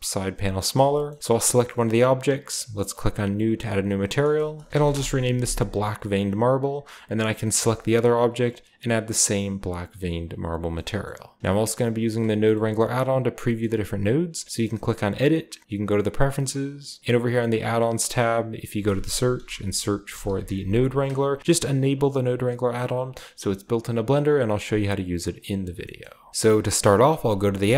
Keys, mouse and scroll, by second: 0.6 typing, 0.8-2.3 shift+middle drag, 3.0-4.1 drag, 4.2 click, 4.4-5.3 typing, 4.7 shift+middle click, 6.0-7.6 drag, 7.6-8.4 middle drag, 8.3-10.0 drag, 10.1 click, 10.5-12.0 scroll down 1, 12.3 click, 12.6-14.3 scroll down 1, 13.1-14.3 middle drag, 13.1 typing, 15.0-17.5 drag, 17.4 typing, 18.0 click, 18.6 click, 19.0-20.3 typing, 20.9 click, 21.4 typing, 25.2 click, 25.6-27.0 scroll down 1, 26.0 typing, 27.0 typing, 27.5 click.